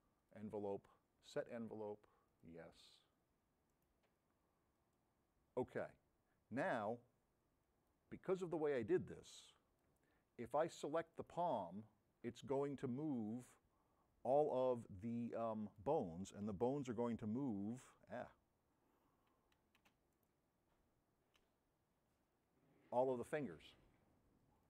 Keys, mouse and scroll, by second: 0.3 click, 1.2 click, 2.4 click, 3.8 middle click, 4.8 right click, 7.7 click, 9.2-10.0 drag, 11.2 middle click, 12.8-13.5 drag, 20.2 middle click, 22.4 v.